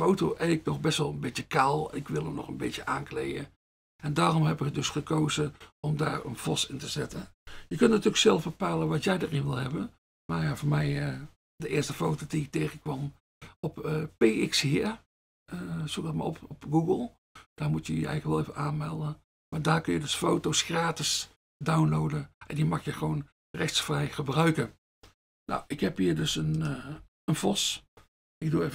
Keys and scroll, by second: 26.4 F1, 27.0 F1.